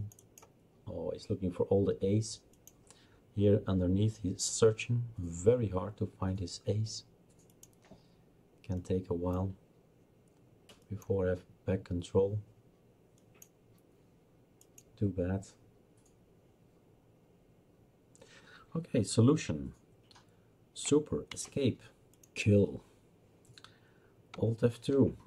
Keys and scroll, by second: 21.3 super+Escape, 24.7 alt+F2.